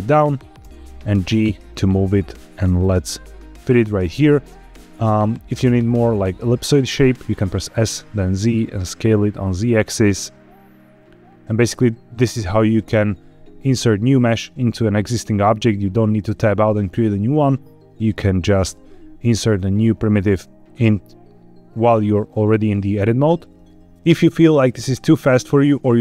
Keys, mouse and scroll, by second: 0.1 click, 0.5 g, 1.6 click, 1.9 s, 2.5 click, 2.7 g, 4.0 click, 7.1 s, 7.4 z, 11.4 click, 23.6-23.9 scroll up 1.